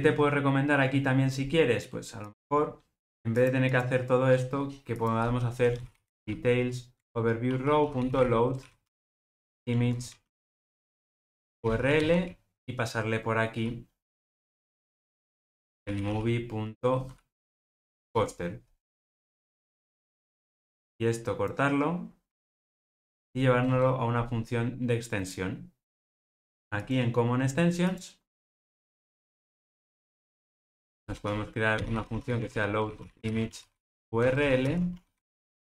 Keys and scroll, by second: 7.0 Return, 18.0 Return, 22.4 super+x.